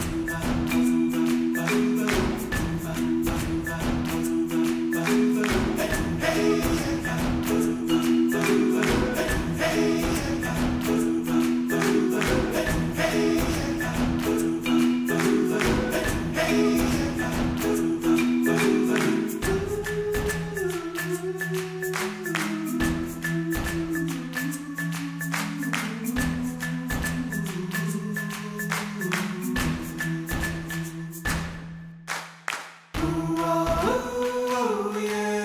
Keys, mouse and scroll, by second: 0.4 KP_1, 1.9 ctrl+z, 2.2 ctrl+z, 4.2 shift+right click, 6.4 click, 7.4-8.4 drag, 8.6-11.2 drag, 11.7-12.7 drag, 14.7 click, 17.4 shift+right click, 18.1 shift+right click, 19.5 click, 20.3 ctrl+z, 20.4 ctrl+z, 21.4-24.9 drag, 24.9 ctrl+z, 26.0 shift+right click, 26.6 click, 27.4 ctrl+z, 28.2 shift+right click, 28.8-32.6 drag, 33.7-34.7 drag.